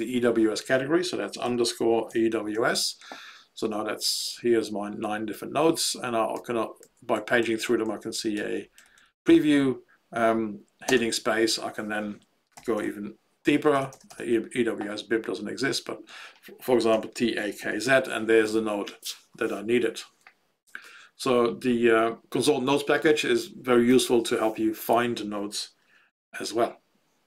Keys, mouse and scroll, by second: 1.4-3.0 typing, 5.0 Down, 5.2 Down, 5.8 Down, 6.3 Down, 6.8 Down, 7.1 Down, 7.3 Down, 7.6 Down, 7.8 Down, 8.0 Down, 8.3 Up, 8.5 Up, 8.7 Up, 8.9 Up, 9.1 Up, 9.3 Up, 9.5 Up, 10.8 space, 12.2-14.0 typing, 16.6-18.3 typing.